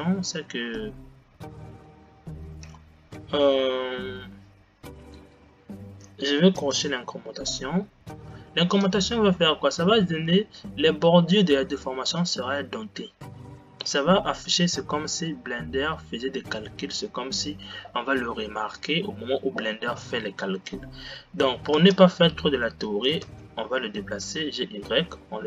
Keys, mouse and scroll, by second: 7.1 click, 9.9 click, 21.9 space, 23.6 g.